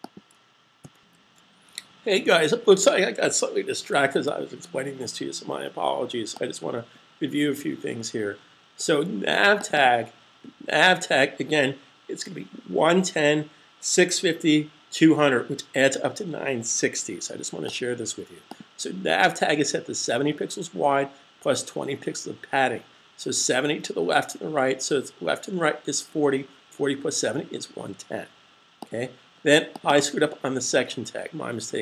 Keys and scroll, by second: 2.7 super+s.